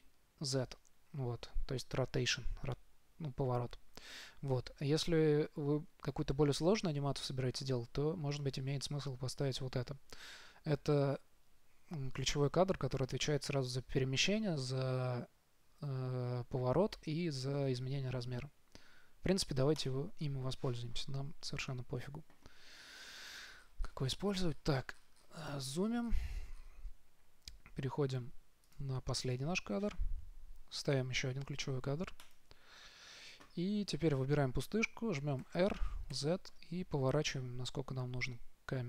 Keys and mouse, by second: 23.6-28.9 middle drag, 28.9-31.2 drag, 31.2 i, 35.7 r.